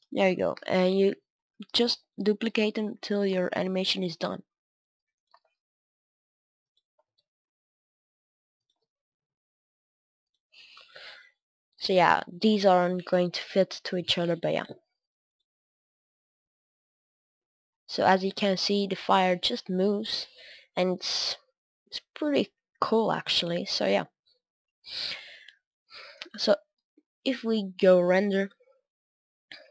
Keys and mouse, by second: 0.8 click, 0.8 shift+d, 3.4-5.1 drag, 3.4 shift+d, 5.4-8.5 drag, 5.4 shift+d, 7.0 shift+d, 8.7-16.8 drag, 8.7 shift+d, 18.9-22.8 drag, 24.7-26.9 drag, 26.1 KP_0, 26.9-29.7 middle drag, 28.2 KP_0.